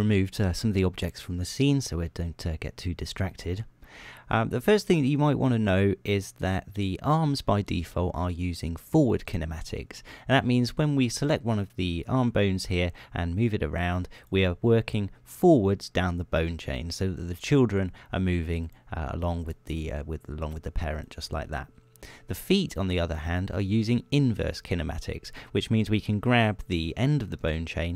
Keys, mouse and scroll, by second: 2.4 click, 3.5 click, 10.9 click, 13.0 r, 14.6 click, 17.8 click, 18.2 r, 19.1 click, 20.0 right click, 20.2 r, 21.6 right click, 27.0 right click.